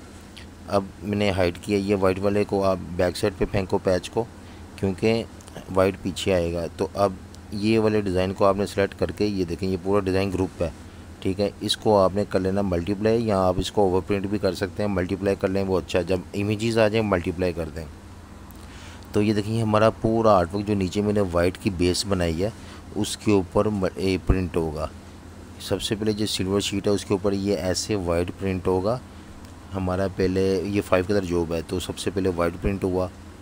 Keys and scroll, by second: 2.0 super+z, 6.8 space, 10.1 super+z, 18.1 typing, 19.7 v, 20.0 v, 32.7-33.4 typing.